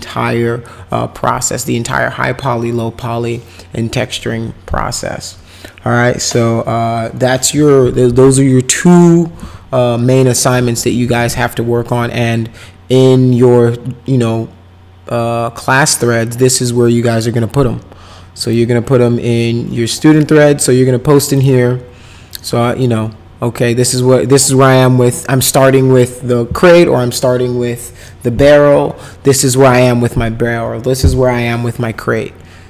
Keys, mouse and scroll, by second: 18.4 click, 21.3 click.